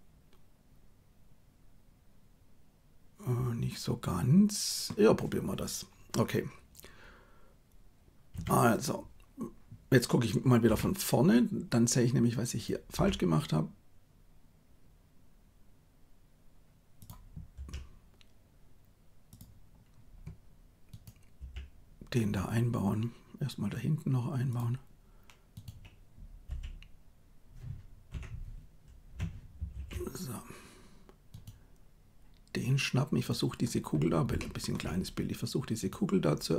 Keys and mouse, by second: 8.3 KP_3, 10.7 KP_1, 12.9 g, 17.6 r, 21.5 g, 26.5 e, 29.6 ctrl+z, 34.3 shift+middle click.